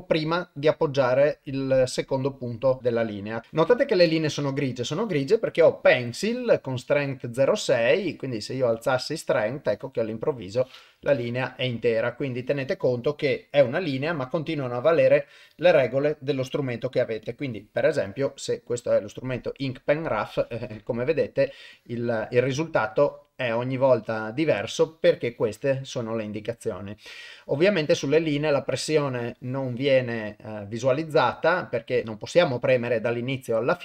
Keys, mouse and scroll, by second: 7.9 click, 8.8-11.0 drag, 15.8-17.4 drag, 18.1-21.4 drag, 21.7 click, 23.1-24.3 drag.